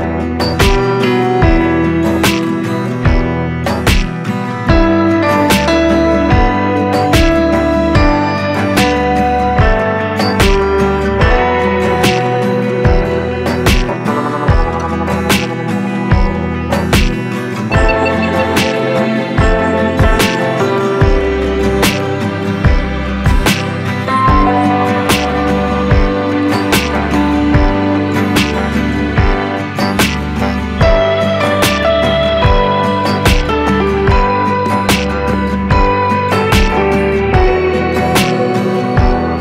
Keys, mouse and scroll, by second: 1.2 Delete, 4.2-12.3 drag, 14.7 ctrl+space, 14.8 click, 17.8-31.4 drag, 38.3 Return.